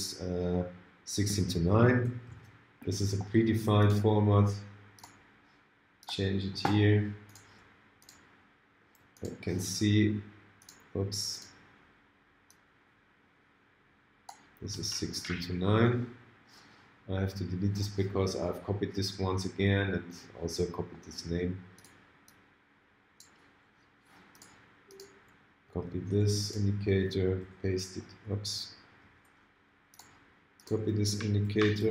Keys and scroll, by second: 2.3 alt+super+a, 31.5 super+c.